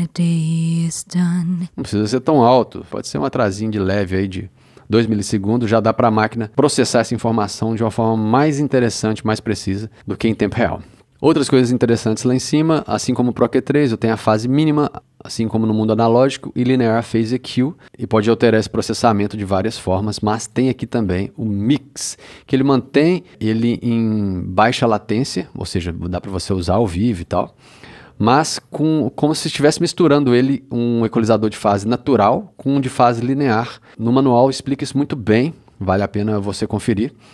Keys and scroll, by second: 1.6 space.